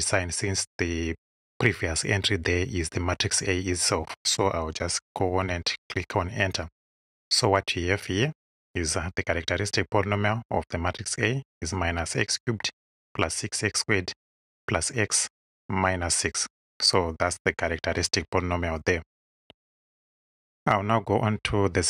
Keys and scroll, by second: 5.3 Return.